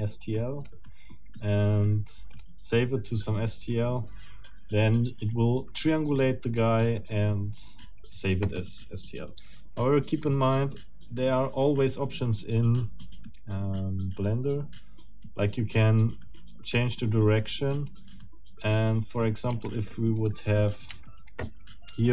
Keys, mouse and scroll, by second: 0.4 middle click, 2.3 click, 19.2 click, 19.5 Tab, 20.2 click, 20.9 Escape.